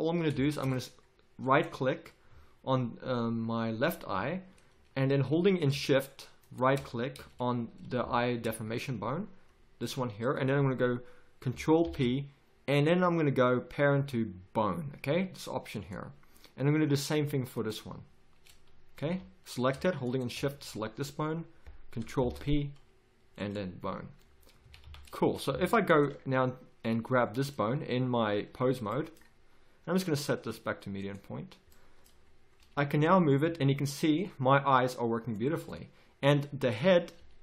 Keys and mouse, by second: 1.5 right click, 2.3 z, 4.1 z, 7.1 z, 11.8 ctrl+p, 17.5-22.2 drag, 19.0 z, 20.6 z, 22.2 ctrl+p, 23.5 click, 24.2-25.3 drag, 24.6 a, 24.8 z, 25.5 a, 25.8-26.9 right drag, 26.9 click, 29.9-31.7 drag, 32.6 g, 37.2 r.